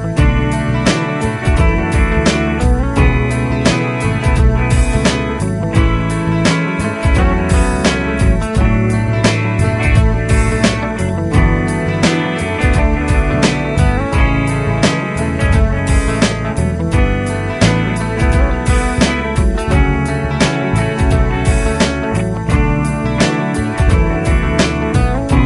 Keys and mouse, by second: 5.5 F3, 7.0 F2, 9.5 ctrl+click, 12.6 F4, 14.4 F2, 16.9 ctrl+click, 19.9 F4, 21.4 F2, 24.6 ctrl+click.